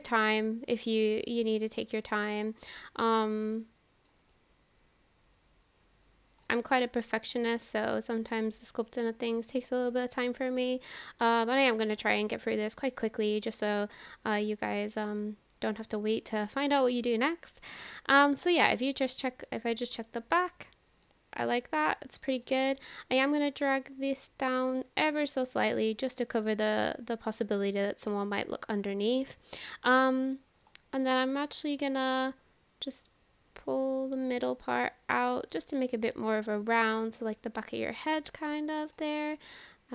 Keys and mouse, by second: 0.8-2.7 middle drag, 3.3 click, 4.3-6.5 middle drag, 6.7 middle click, 7.8 click, 8.7-9.7 middle drag, 10.1 shift+middle click, 10.6 middle click, 11.3 shift+middle click, 12.0 middle click, 13.0 middle click, 14.0 click, 15.2 click, 16.6 shift+middle click, 17.0-18.2 middle drag, 18.8 middle click, 19.5 middle click, 20.5 middle click, 21.9 middle click, 23.1-27.6 drag, 28.1-30.4 middle drag, 31.5 middle click, 32.9-34.3 drag, 36.4 click, 37.3-38.3 drag, 38.6 middle click.